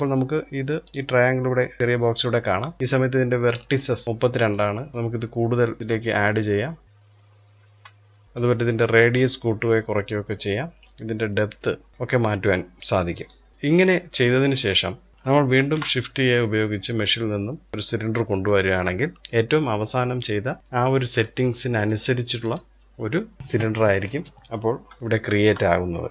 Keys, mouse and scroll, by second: 0.4-3.0 drag, 3.0-3.5 scroll up 1, 3.5-4.0 shift+middle drag, 4.0-6.5 drag, 8.0-12.7 drag, 12.8-13.5 shift+middle drag, 13.5 click, 13.8-14.7 middle drag, 14.7 click, 15.1 shift+a, 20.6 click, 21.3 click, 22.0 click, 24.7-26.1 shift+middle drag.